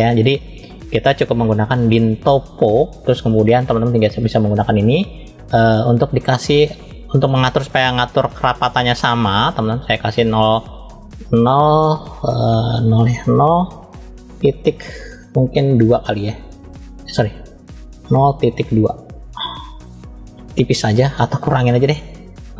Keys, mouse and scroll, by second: 4.2 click, 10.1-19.7 drag, 21.0-22.5 drag.